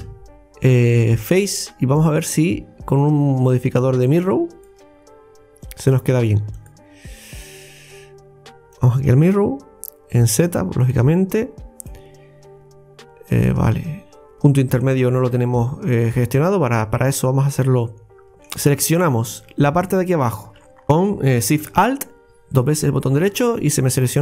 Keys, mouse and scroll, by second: 4.1-6.0 drag, 6.6-9.6 drag, 10.4 click, 11.9-14.9 middle drag, 17.6 click, 18.3 middle click, 18.9 right click, 19.6 alt+shift+right click, 19.9 alt+shift+right click, 20.1 alt+shift+right click, 20.3 alt+shift+right click, 20.7 scroll up 2, 22.6 alt+shift+right click, 23.4 scroll down 2, 24.0-24.2 middle drag.